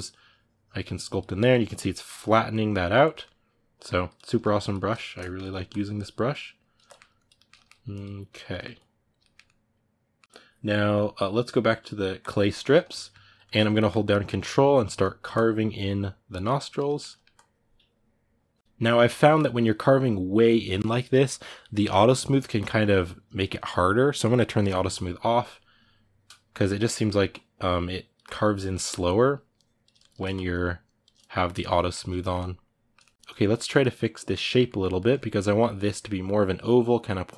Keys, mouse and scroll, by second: 1.1-2.3 ctrl+middle drag, 2.3 click, 2.8-3.8 ctrl+middle drag, 3.8 click, 4.0 middle click, 4.4 click, 4.8 shift+middle click, 5.4-6.6 drag, 6.6 ctrl+middle click, 6.9 click, 7.1 ctrl+middle click, 7.7 click, 8.3 ctrl+middle click, 8.5 click, 9.0-12.0 ctrl+middle drag, 12.0 click, 12.3-13.6 ctrl+middle drag, 13.6-16.6 ctrl+drag, 16.6 ctrl+middle click, 17.1-26.6 ctrl+drag, 26.6 middle click, 27.0-29.7 ctrl+drag, 29.7 shift+middle click, 30.1-31.5 ctrl+drag, 31.5-37.3 ctrl+middle drag.